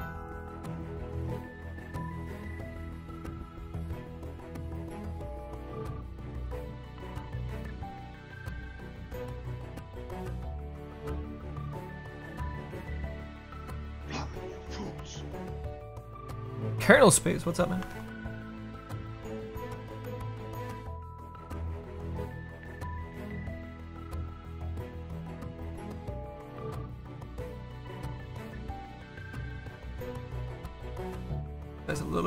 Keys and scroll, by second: 21.0 s.